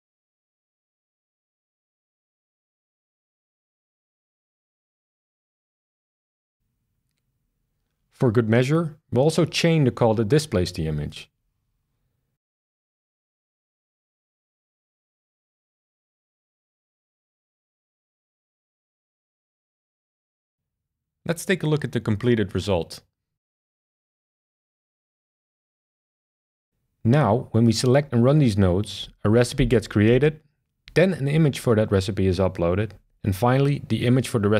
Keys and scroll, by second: 1.6-3.9 typing, 4.1 Return, 12.5 super+c, 15.8 super+v, 20.1 BackSpace.